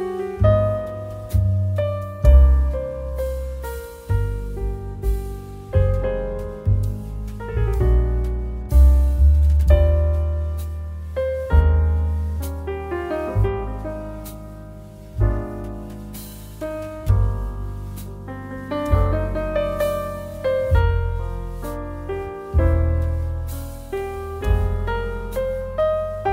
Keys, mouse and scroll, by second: 1.3 click, 14.0 ctrl+a, 18.2 ctrl+c, 24.3 click.